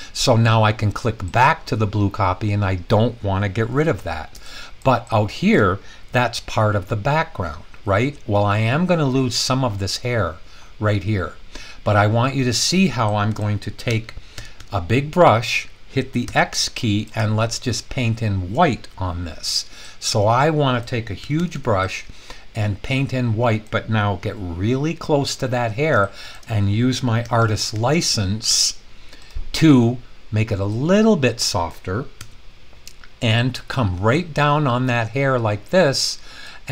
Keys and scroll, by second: 13.9-14.6 typing, 16.3 typing, 21.2-21.5 typing, 27.2-28.5 typing, 32.2 Return.